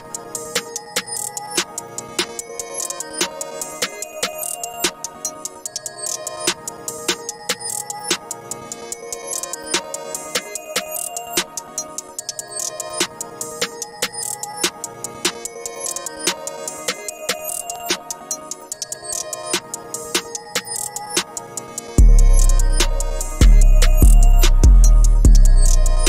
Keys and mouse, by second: 13.4 click, 13.7-16.8 drag, 18.6 click.